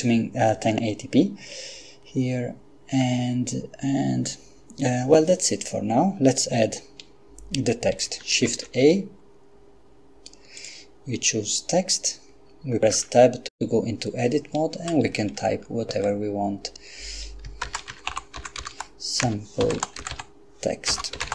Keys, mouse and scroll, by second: 8.4 shift+a, 10.6 click, 13.1 Tab, 15.0 BackSpace, 15.3 BackSpace, 15.5 BackSpace, 17.7-21.3 typing.